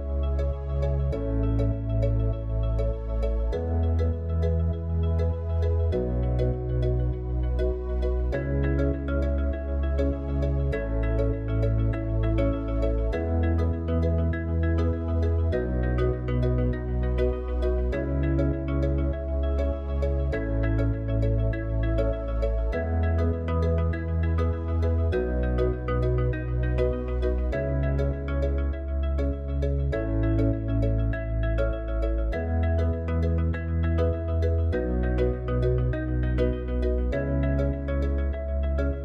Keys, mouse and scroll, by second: 18.4 click, 20.4 click, 22.8 drag.